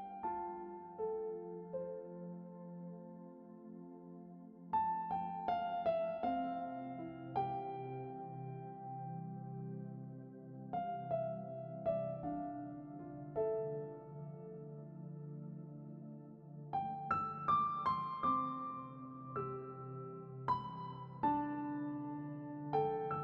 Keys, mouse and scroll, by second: 2.2-3.8 drag, 9.3 click, 11.1-12.6 scroll up 1, 13.2-18.2 drag, 23.1 z.